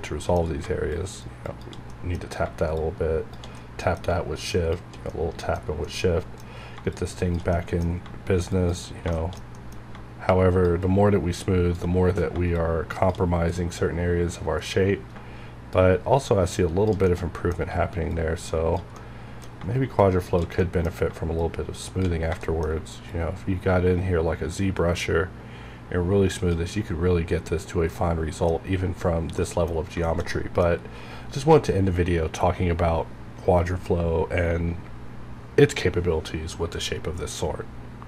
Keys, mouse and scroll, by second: 1.5 shift+click, 1.9 middle click, 2.4 scroll up 1, 2.8 shift+click, 3.6 middle click, 3.9 scroll down 1, 4.4 shift+click, 5.1 middle click, 5.5 scroll down 1, 5.8 middle click, 6.5 scroll up 1, 6.9 shift+click, 7.5 middle click, 7.6 middle click, 8.7 shift+click, 9.1 shift+middle click, 9.5 middle click, 10.3 shift+click, 10.8-12.5 shift+drag, 12.5 shift+click, 13.3 scroll down 1, 13.8-14.9 middle drag, 14.8 scroll up 1, 15.7-17.1 shift+drag, 17.1 middle click, 18.1 shift+click, 18.9 middle click, 19.1 middle click, 20.0 shift+click, 20.5 scroll down 1, 20.6 middle click, 21.4 click, 22.4 middle click, 22.4 shift+middle click, 23.1-27.1 drag, 27.2 shift+scroll down 1, 28.1 middle click, 28.8 scroll up 1, 29.1 scroll down 1, 29.4 middle click, 29.9 scroll up 1, 30.0 shift+middle click, 30.7-32.7 scroll down 1.